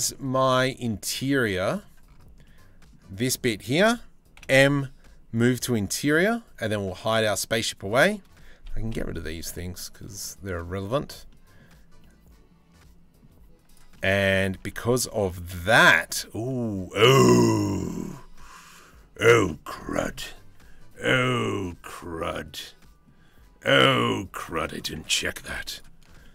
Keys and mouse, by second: 1.4 middle click, 2.0-2.5 middle drag, 2.8 middle click, 4.0 m, 6.9 middle click, 8.6 h, 9.0 click, 9.2 h, 9.4 middle click, 10.1 middle click, 10.9 middle click, 11.6-12.8 middle drag, 13.6-13.9 middle drag, 14.3-14.7 drag, 14.9 Tab, 15.7 Tab, 16.1 click, 17.0-18.8 drag, 21.6 click, 21.9-22.7 drag, 23.8 Tab, 24.9 3.